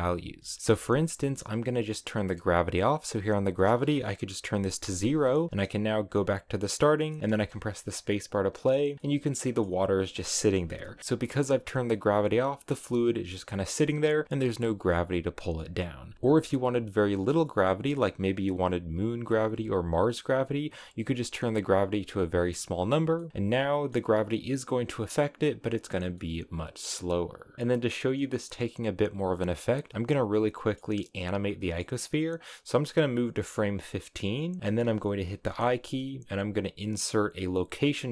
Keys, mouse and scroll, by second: 3.2-7.0 drag, 7.0 middle click, 7.5 space, 8.9 scroll down 1, 9.0 middle click, 10.0 space, 10.6 KP_Decimal, 11.0-13.3 shift+middle drag, 13.3 scroll up 1, 13.5-14.7 middle drag, 14.7 scroll down 2, 14.9-16.1 middle drag, 16.1 space, 17.6-20.7 drag, 22.0-23.1 drag, 23.1 middle click, 23.3 space, 23.5-26.1 shift+middle drag, 26.1 scroll down 1, 26.2-28.8 middle drag, 30.3-31.5 middle drag, 31.4 scroll up 1, 31.6 middle click, 32.4-35.2 drag, 35.2 i.